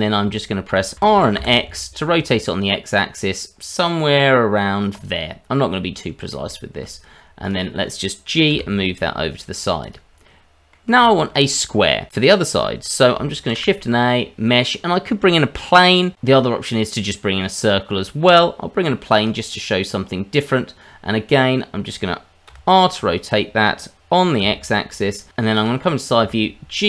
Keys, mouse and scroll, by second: 0.9 r, 5.7 middle click, 6.5 shift+middle click, 7.4 click, 8.5 g, 10.2 middle click, 11.1 shift+middle click, 11.5-12.1 scroll up 1, 13.5 shift+a, 20.1-21.3 scroll up 1, 21.3 middle click, 22.4 r, 25.1 scroll down 1, 25.3 middle click, 25.6 click, 26.2 g.